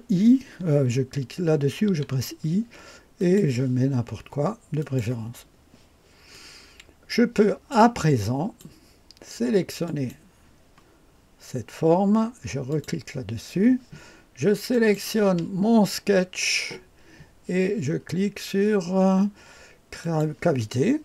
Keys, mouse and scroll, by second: 3.1 click, 4.8 click, 6.3-7.7 drag, 8.0 click, 9.8 click, 12.7 click, 14.7 click, 20.0 click.